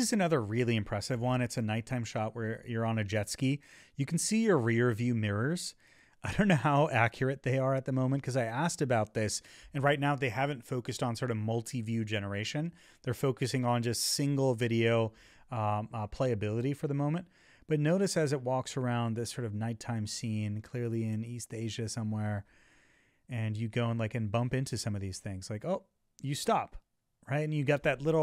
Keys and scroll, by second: 0.7 Right, 3.1 Left, 5.3 Left, 6.7 Right, 8.5 Left, 9.0 Left, 9.7 Left, 10.7 Left, 13.0 Left, 13.7 Left, 14.7 Right, 15.5 Right, 15.8 Right, 16.3 Right, 17.3 Right, 18.7 Right, 19.3 Left, 23.1 Up, 24.0 Left.